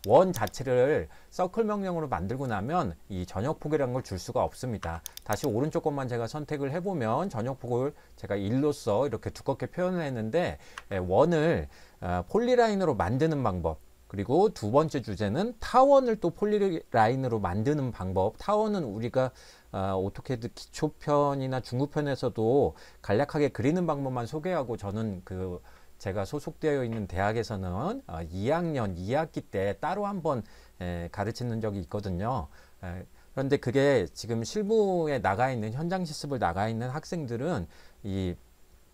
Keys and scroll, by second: 4.8 Escape, 10.7 Escape.